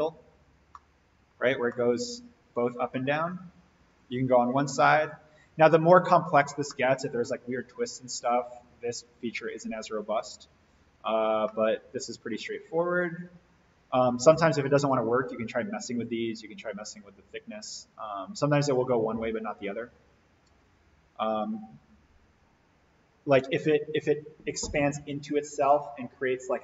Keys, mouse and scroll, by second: 0.1-0.5 scroll down 1, 0.7-1.3 middle click, 1.5 scroll up 1, 1.7-3.3 middle drag, 3.9 click, 6.7-7.2 middle drag, 11.5-12.4 middle drag.